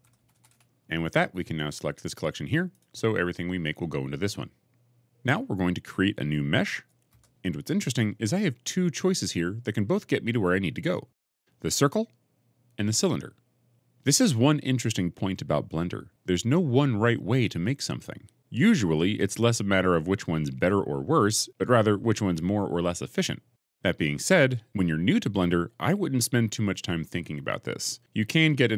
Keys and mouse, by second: 2.6 right click, 6.9 shift+a.